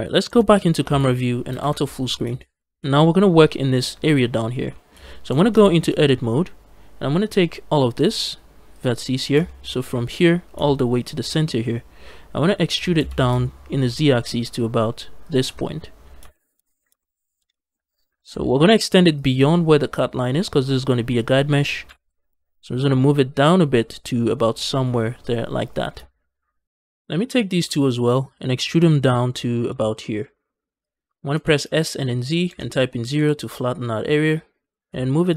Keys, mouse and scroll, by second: 0.1 KP_0, 1.4 ctrl+space, 2.0 scroll down 2, 2.2 shift+middle click, 2.7 shift+middle click, 4.6 shift+middle click, 4.6 scroll down 1, 4.8 scroll up 1, 5.1 Tab, 5.5 shift+middle click, 8.6 click, 9.1 scroll down 1, 9.3 shift+middle click, 10.8 ctrl+click, 11.4-12.1 scroll up 2, 12.6 e, 12.8 z, 15.1 shift+click, 15.8 scroll down 2, 16.2 shift+middle click, 16.5 scroll up 1, 16.9 shift+middle click, 17.4 shift+middle click, 18.0 g, 18.2 z, 19.0 shift+click, 21.7 g, 21.9 z, 25.5 shift+click, 26.8 click, 27.1 shift+click, 28.4 e, 28.6 z, 30.7 shift+click, 31.2 s, 31.5 z, 32.3 KP_0, 33.0 Return, 34.5 g, 34.7 z.